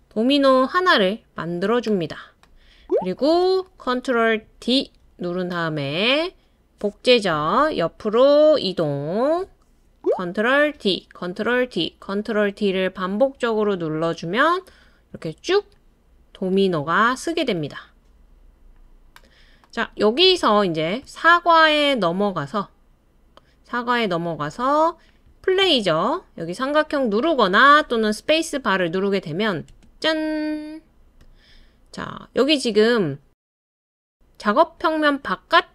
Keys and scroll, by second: 4.6 super+d, 7.7 Right, 8.2 Right, 8.3 Right, 8.4 Right, 8.5 Right, 11.5 super+d, 11.8 super+d, 12.0 super+d, 15.1 d, 29.7 space.